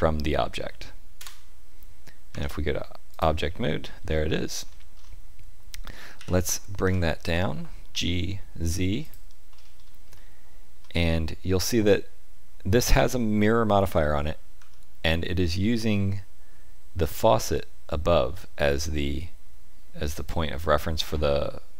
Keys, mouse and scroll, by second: 2.2 Tab, 3.0 click, 4.0-6.1 scroll down 11, 6.1-6.7 scroll down 1, 6.1 KP_1, 6.8 g, 9.5-10.0 scroll up 5, 10.1 shift+middle click, 14.5 g.